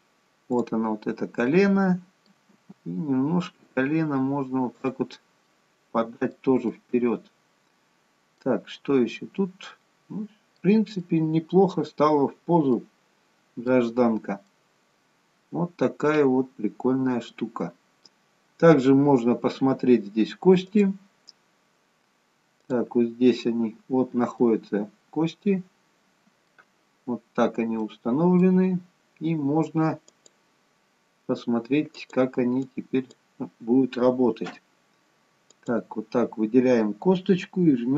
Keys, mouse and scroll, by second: 0.6 click, 1.6 middle click, 3.0 g, 5.5 middle click, 6.7 middle click, 9.2 middle click, 11.1 middle click, 12.0-12.8 scroll down 2, 12.8 middle click, 12.8-14.1 scroll down 1, 14.5 middle click, 18.4-19.1 scroll up 3, 19.1 scroll down 1, 19.3-21.0 scroll down 1, 21.0 click, 22.9 click, 24.4 middle click, 27.8 middle click, 30.1 click, 31.9 click, 32.7 click, 35.6 click.